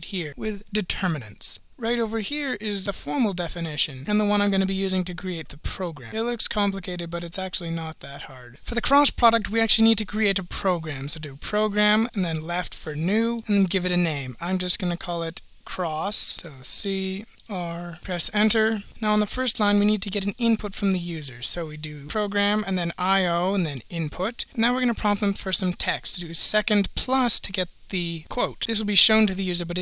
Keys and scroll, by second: 12.2 (, 13.4 Return, 18.0 7, 18.4 Return, 22.5 Right, 23.7 Return.